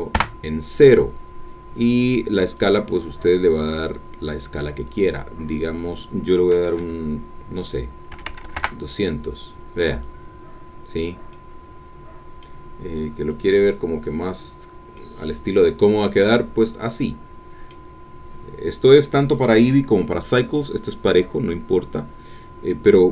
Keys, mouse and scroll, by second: 0.1 KP_Enter, 2.5-5.2 drag, 5.7-8.1 drag, 8.1 KP_2, 8.2 KP_0, 8.5 KP_Enter, 9.9 middle click, 9.9-11.1 scroll down 1, 11.3-13.0 middle drag, 14.9-18.0 middle drag.